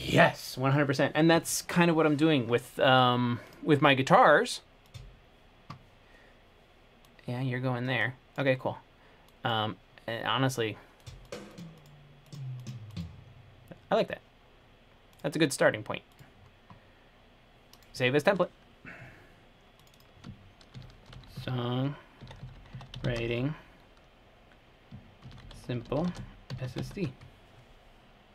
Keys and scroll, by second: 20.8-23.3 typing, 25.3-27.5 typing.